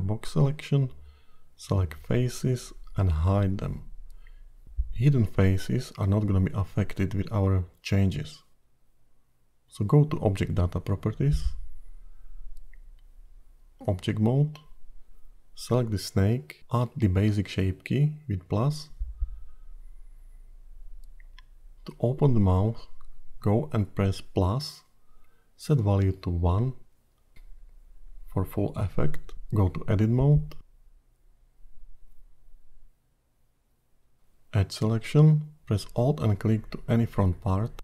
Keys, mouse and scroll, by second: 6.3 h, 9.6 click, 11.4 Tab, 12.0-12.6 scroll down 8, 13.9 shift+z, 14.8-15.3 scroll down 2, 15.3-17.0 scroll up 4, 17.4 click, 24.6 click, 27.1 click, 29.9 Tab, 30.5-31.0 scroll down 3, 31.0-31.8 scroll up 9, 31.9 middle click, 32.8 scroll down 1, 33.0-33.4 scroll up 3, 34.7 2, 36.2 alt+click, 37.7 g.